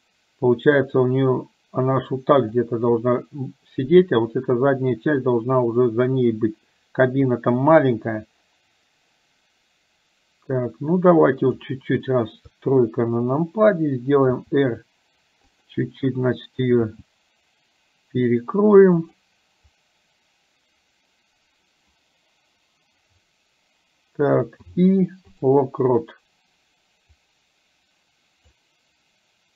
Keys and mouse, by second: 1.3-3.0 drag, 7.9-11.9 drag, 12.5 KP_3, 14.4 r, 17.1 g, 27.4-28.8 drag.